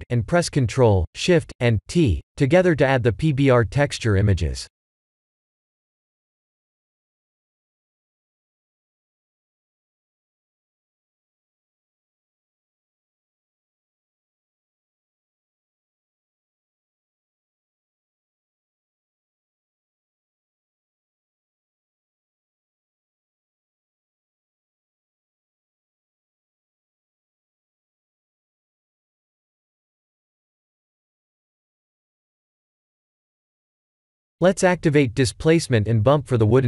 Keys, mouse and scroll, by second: 9.6 shift+middle click, 11.2 click, 11.9 Tab, 15.5 click, 21.7 shift+`, 30.3 click, 32.3 click, 33.0 click, 34.5 click, 35.1-36.6 scroll down 20.